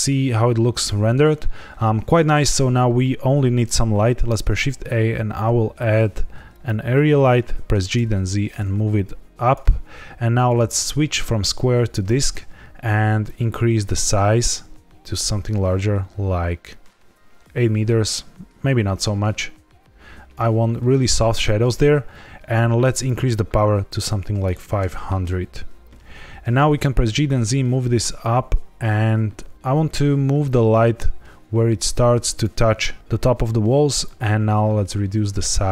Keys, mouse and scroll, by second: 4.1 shift+a, 7.6 g, 7.9 z, 9.4 click, 10.3 click, 13.2 click, 22.9 click, 26.5 g, 27.0 z, 32.3 click, 34.0 click.